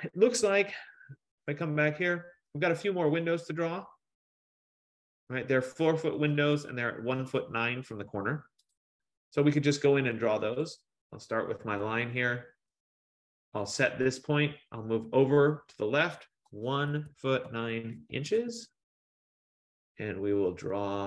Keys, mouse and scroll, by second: 1.9 click, 8.9 click, 10.7 click, 12.0 middle click, 12.0 middle click, 13.1 F15, 16.7-18.8 typing.